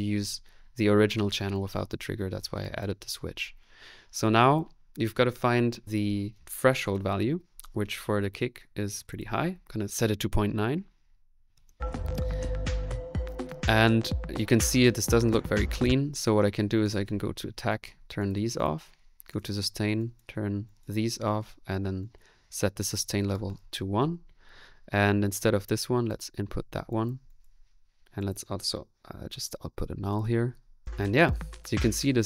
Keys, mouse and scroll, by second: 15.7 space, 28.9-29.7 typing, 30.8 click, 31.8 middle click.